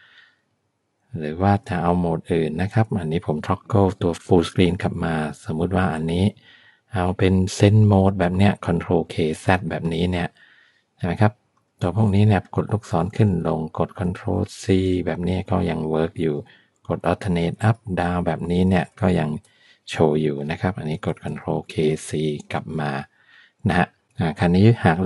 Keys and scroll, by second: 2.8 F11, 12.4 Down, 13.2 Up, 14.7 ctrl+c, 16.0 Down, 17.2 alt+Up, 17.8 alt+Down, 18.7 alt+Up, 21.3 ctrl+k.